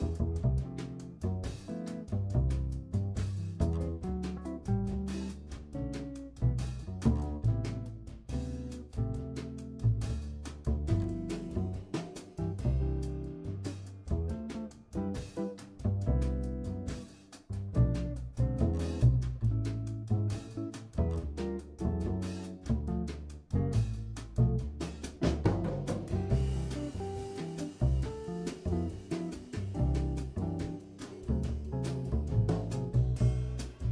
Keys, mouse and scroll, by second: 3.6 ctrl+z, 4.8 click, 7.2 g, 8.6 Tab, 12.6 ctrl+Tab, 14.4 r, 17.8 click, 18.8 r, 20.9-21.6 scroll up 5, 21.6-22.3 middle drag, 22.3-24.3 scroll up 9, 24.3-25.5 scroll down 13, 25.5-25.9 middle drag, 25.9 ctrl+z, 26.0 ctrl+z, 26.2 ctrl+z, 26.4 ctrl+s, 26.6 scroll down 2, 26.7-27.8 shift+middle drag, 28.0 click, 28.5 r, 29.7 scroll up 4, 29.9-30.3 middle drag, 32.6-33.9 drag.